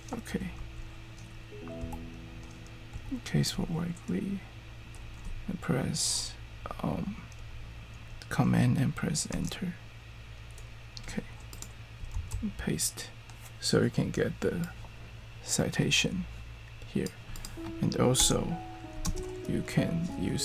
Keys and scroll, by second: 0.6 Right, 1.6-3.5 typing, 9.3 super+Return, 12.1 super+v, 18.2 Return, 19.0 alt+space.